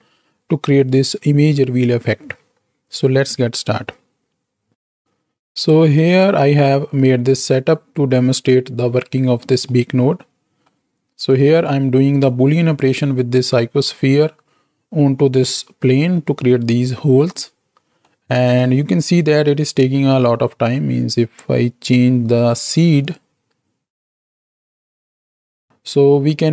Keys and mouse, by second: 4.8 click, 6.9 click, 9.9-10.6 middle drag, 11.3-12.2 drag, 17.3 middle click, 18.5 click, 23.0 click, 26.1-26.5 middle drag.